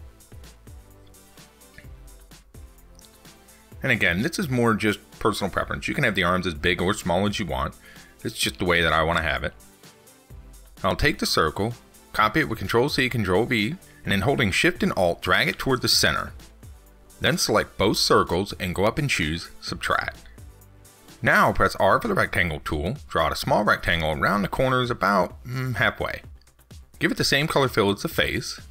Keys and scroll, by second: 12.3 ctrl+c, 12.5 ctrl+v.